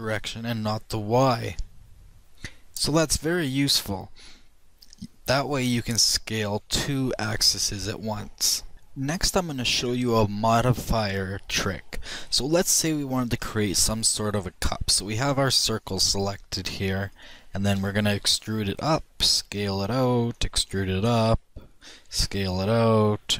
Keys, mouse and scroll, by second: 16.0-17.7 drag, 17.7 e, 19.5 s, 20.3 e, 21.9 s.